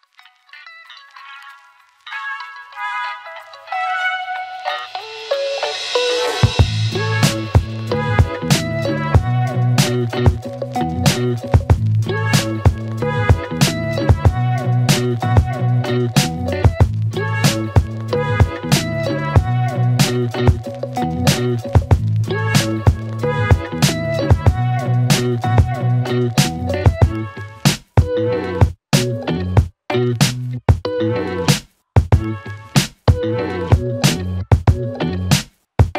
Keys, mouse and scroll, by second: 3.0 space, 4.1-6.1 click, 9.4 click, 11.8-13.2 scroll up 1, 14.7 click, 16.6 click, 17.8-19.0 typing, 19.7 click, 20.8 click, 22.9-23.7 click, 24.0 click, 25.5 click, 26.8-30.4 click, 32.5 click.